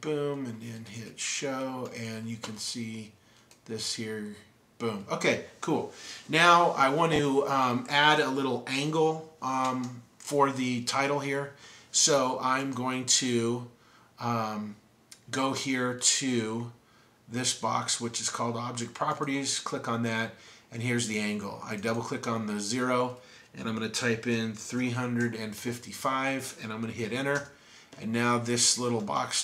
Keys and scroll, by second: 1.4-1.9 typing, 24.1-25.8 typing.